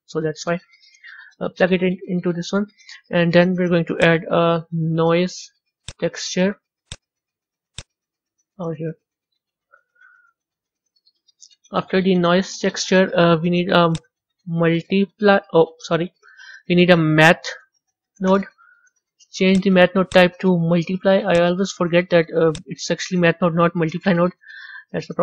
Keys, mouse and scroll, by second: 8.6 click, 10.7-20.4 middle drag, 20.4-23.6 drag.